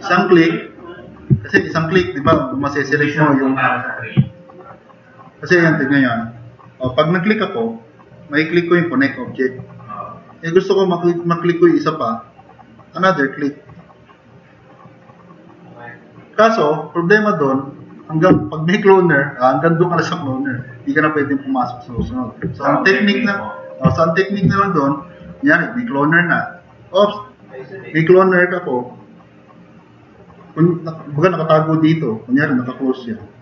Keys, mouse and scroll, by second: 1.6 alt+s, 2.3 alt+s, 4.4-5.0 drag, 6.8 drag, 25.3 click.